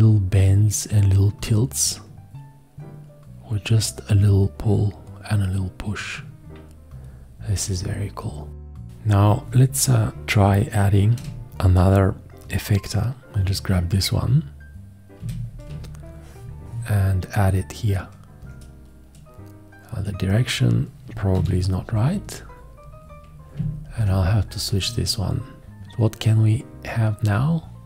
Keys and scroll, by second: 15.2 g, 21.5 h.